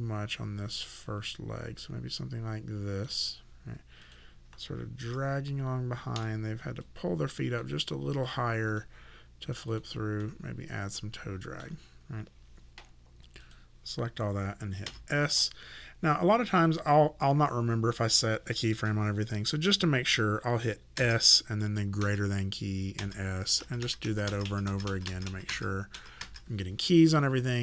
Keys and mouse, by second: 4.0 click, 5.0 e, 6.1 w, 6.8 click, 10.2 middle click, 13.4 click, 14.9 s, 16.6 click, 21.0 s, 22.0 >, 23.0 s.